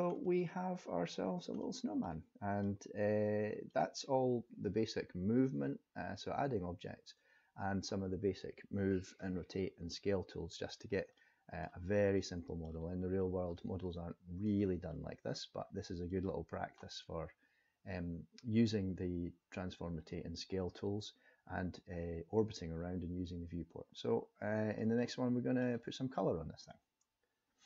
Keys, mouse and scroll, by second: 0.2 middle click, 1.2 scroll down 2, 1.5 middle click, 2.6 middle click, 4.0-5.6 scroll up 2, 10.7-11.4 scroll up 2, 11.2 middle click, 12.1 middle click, 13.2-13.5 scroll up 2, 13.5 middle click, 14.9-15.2 scroll down 1, 15.4 middle click, 24.8 middle click.